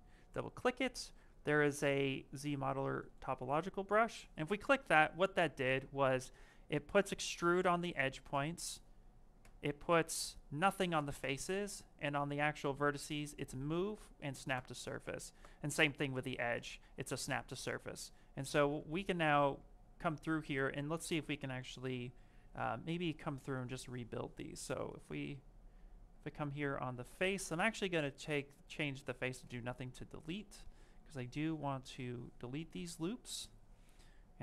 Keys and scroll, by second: 5.6 space, 9.7 space, 12.5 space, 14.9 space, 15.6 space, 16.5 space, 26.5 space.